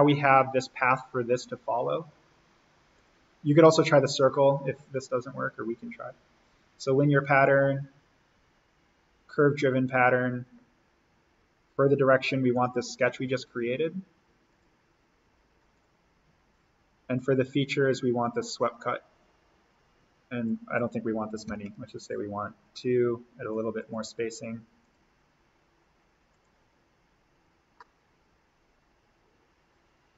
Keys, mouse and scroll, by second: 2.9 click, 9.5 click, 12.5 click, 18.4 click, 21.5 2, 21.6 Tab, 23.5 click, 27.7-30.1 middle drag.